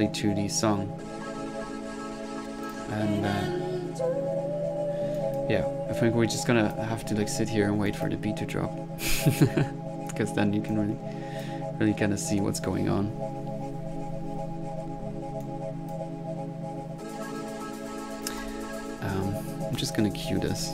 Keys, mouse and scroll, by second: 2.7 click, 5.2-5.6 drag, 6.4 click, 7.9 click, 10.7-11.7 drag, 15.4-16.2 drag, 18.3 click, 19.8 click.